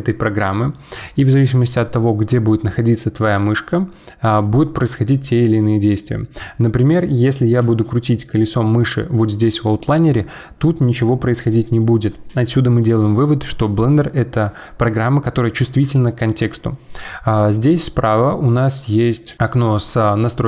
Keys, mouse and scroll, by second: 6.3-6.6 scroll up 2, 7.1 scroll down 1, 7.7 scroll down 1, 8.1 scroll up 1, 8.3 scroll down 1, 8.5 scroll up 1.